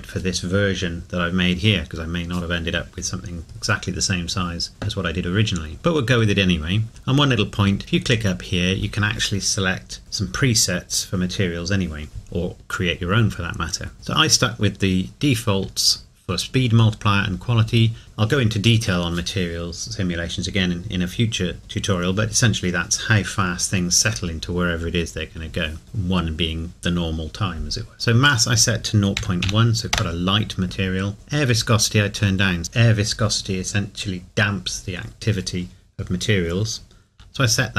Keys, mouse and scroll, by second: 5.7 middle click, 6.9-8.0 scroll up 1, 8.0 click, 28.2 click, 29.2 KP_Decimal, 30.0 KP_Enter, 32.6 click.